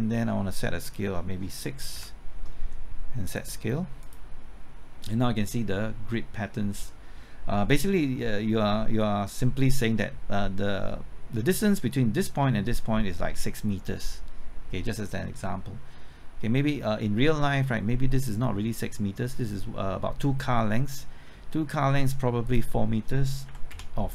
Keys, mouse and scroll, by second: 1.9 KP_6, 3.3 click, 9.6-10.2 scroll up 1, 22.4 click, 23.4 KP_4, 23.7 Return.